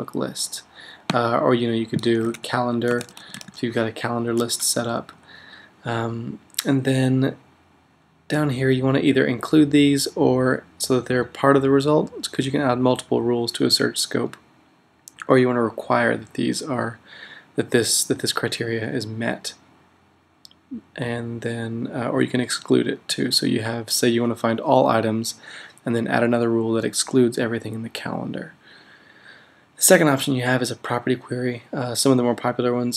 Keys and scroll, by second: 2.0-3.9 typing, 5.1 /.